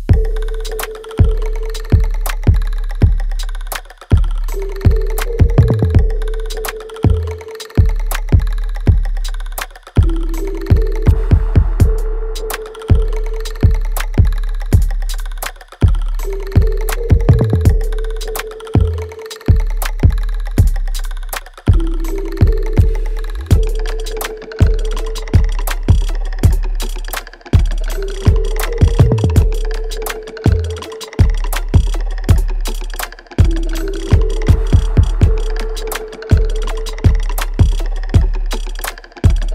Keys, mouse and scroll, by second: 0.9-4.6 drag, 4.6 click, 5.9 right click, 6.4 click, 8.6 right click, 9.1 click, 10.1 space, 10.9-12.9 alt+drag, 12.9 alt+right click, 13.2-16.1 alt+drag, 16.1 space, 17.0 alt+right click, 18.4 click, 18.7-20.0 alt+right drag, 20.0 right click, 20.7 click, 21.4-23.1 shift+right drag, 23.1 alt+right click, 23.8 right click, 24.5 click, 24.9 right click, 25.6 click, 25.9 alt+right click, 26.3 alt+middle click, 27.4 alt+right click, 27.8 alt+middle click, 28.4 click, 28.8-30.3 right drag, 30.3 click, 31.1 w, 31.8-35.8 drag, 35.8 right click, 36.3 click, 36.6 alt+middle click, 37.0-39.1 alt+right drag, 39.1 space.